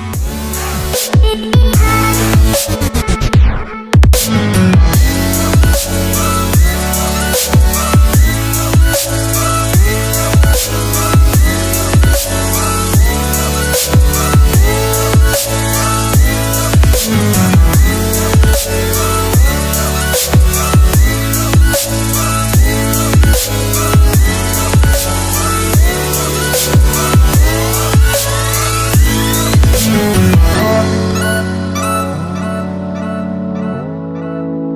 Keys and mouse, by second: 0.0 shift+a, 3.7 click, 6.3 click, 9.5 n, 10.3 click, 10.6 click, 10.9-12.2 drag, 12.2 right click, 13.7 shift+right click, 14.8 shift+right click, 16.1-17.6 drag, 18.4 click, 18.8 shift+a, 25.0-25.7 drag, 27.3 shift+click, 28.5-29.8 drag, 30.3 click, 31.0 shift+a.